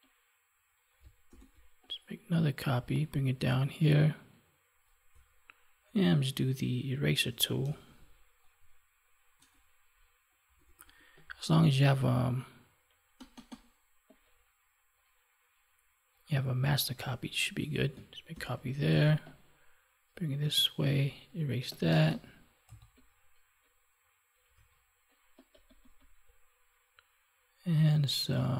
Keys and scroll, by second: 1.2 ctrl+j, 18.3 ctrl+j.